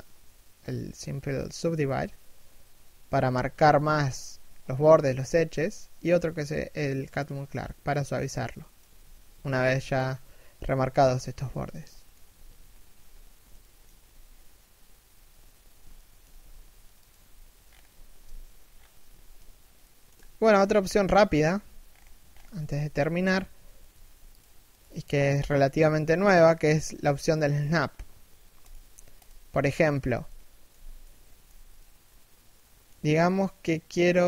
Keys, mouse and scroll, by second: 8.2 shift+middle click, 9.0 a, 9.6 right click, 11.7 shift+middle click, 12.7-13.2 scroll down 1, 13.2 shift+middle click, 15.7 alt+shift+middle click, 16.8 a, 17.3 scroll up 1, 17.8 a, 18.3 scroll down 1, 18.6 a, 19.3 shift+middle click, 21.4-22.2 scroll up 1, 22.2 alt+right click, 22.4 g, 23.1 a, 23.3 right click, 23.4 g, 24.2 right click, 24.2 g, 28.9 z, 29.7 middle click, 30.3 z, 30.6 middle click, 31.1 z, 31.4 middle click, 32.5 z, 32.8 middle click.